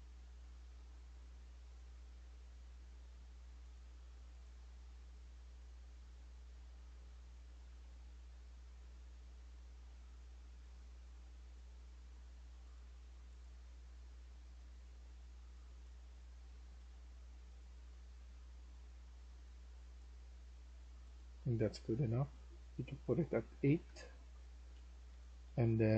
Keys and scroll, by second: 0.0-0.9 typing, 5.2-6.1 typing, 7.4 typing, 8.7-9.6 typing, 14.0-14.4 typing, 15.7-18.3 typing, 23.6 8, 23.7 Return, 24.6-25.9 typing.